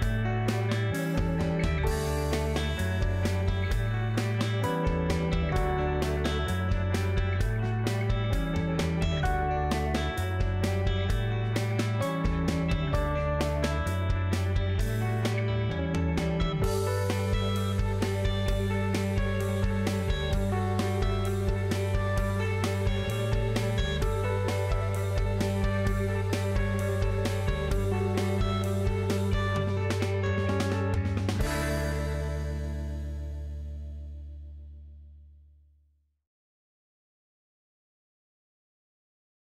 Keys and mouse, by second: 3.2 Tab, 4.1 click, 4.6 Tab, 5.1 click, 6.7 2, 6.9 click, 7.6 middle click, 8.4 alt+z, 8.6 middle click, 9.9 middle click, 11.2 g, 12.7 z, 14.8 z, 15.5 alt+z, 16.4 click, 16.9 Tab, 17.3 click, 17.8 Tab, 18.4 click, 19.7 KP_3, 21.1 KP_Decimal, 22.1 click, 24.6 shift+click, 25.8 g, 29.6 alt+z, 30.2 Tab, 30.6 alt+z, 31.1 middle click, 31.4 click, 33.7 KP_3, 34.0 KP_Decimal, 36.2-37.2 middle drag, 38.1 ctrl+s.